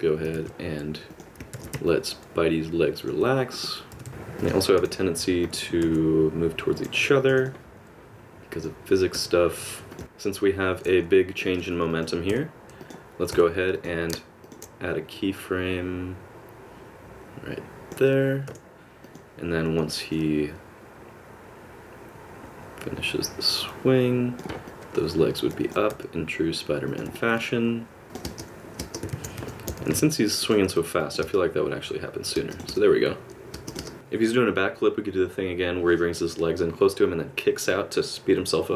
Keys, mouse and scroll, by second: 0.4 alt+r, 1.1 click, 1.6 alt+r, 1.9 middle click, 3.5 click, 3.9 r, 4.1 r, 4.8 i, 5.4 click, 5.8 r, 7.3 i, 7.4 click, 8.5 click, 9.1 r, 11.4 click, 11.9 click, 12.3 h, 12.8 click, 13.3 h, 13.7 click, 14.4 shift+click, 14.5 shift+click, 15.3 click, 20.1 click, 24.7 middle click, 25.9 r, 27.1 middle click, 28.0 click, 28.0-29.8 typing, 28.1 click, 29.1 alt+a, 31.0 click, 31.2 space, 32.4 space, 32.5 click, 32.7 space, 33.6 space, 33.7 click, 33.8 space, 35.1 click.